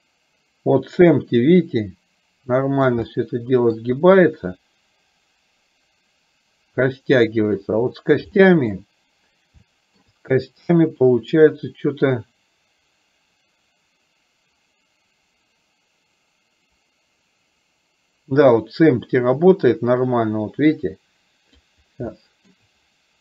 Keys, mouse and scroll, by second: 3.2-3.9 middle drag, 4.6-7.7 drag, 8.4-8.8 shift+middle drag, 9.7-10.1 shift+middle drag, 11.1-21.8 drag, 22.2-22.6 shift+middle drag.